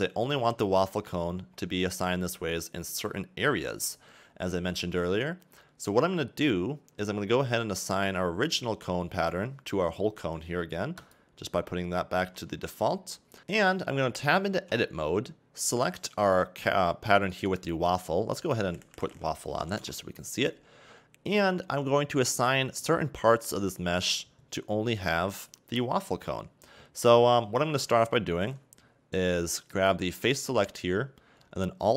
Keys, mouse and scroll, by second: 0.6 scroll down 2, 0.8 middle click, 1.6-2.1 scroll up 2, 2.4-4.4 scroll up 2, 7.8 click, 8.6 Tab, 11.2 click, 12.5 Tab, 14.7 Tab, 16.2 click, 19.8 f, 29.8 click.